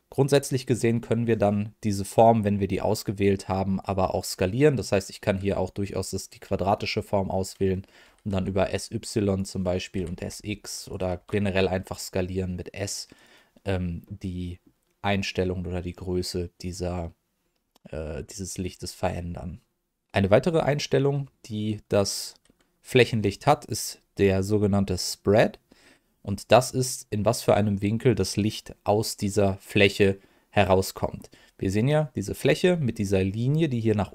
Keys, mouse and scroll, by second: 2.1-4.0 drag, 4.7 middle click, 8.0 s, 8.3 y, 9.3 click, 9.9 s, 10.1 x, 10.8 click, 11.1 s, 13.1 click, 14.0 middle click, 21.1 middle click, 26.4 middle click, 29.7 middle click.